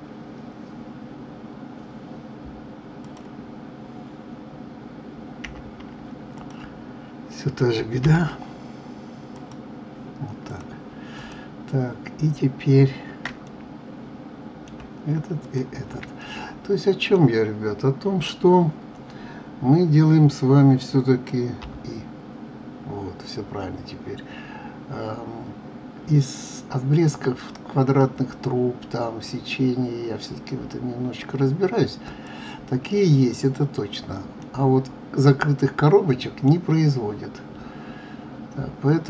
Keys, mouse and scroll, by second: 3.0 click, 5.4 j, 6.3 click, 8.0 l, 9.3-10.6 drag, 11.2 click, 13.4-15.4 middle drag, 15.4 shift+click, 16.2-19.1 middle drag, 34.4-37.4 middle drag.